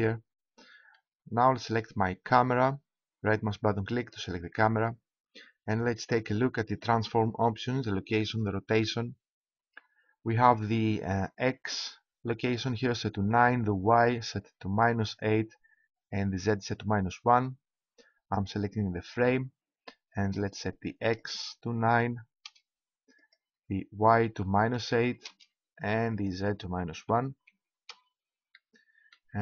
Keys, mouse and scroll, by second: 2.2 middle click, 4.2-5.8 right drag, 19.1-20.7 right drag, 20.2-22.9 drag, 23.2-24.9 drag, 26.1-27.9 drag, 28.5-29.4 middle drag.